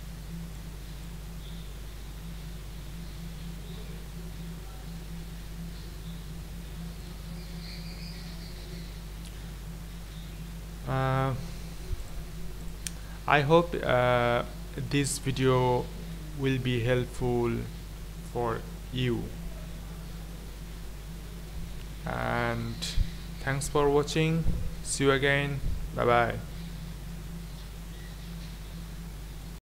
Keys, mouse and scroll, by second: 3.6-12.1 middle drag, 12.7-26.9 middle drag, 26.9-29.6 middle drag.